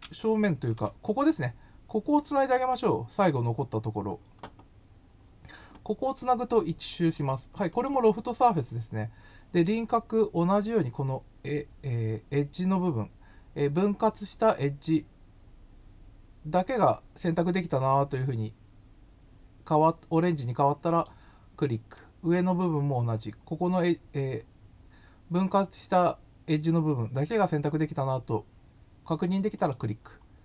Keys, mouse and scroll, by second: 7.7 click, 20.9 click, 29.6 click.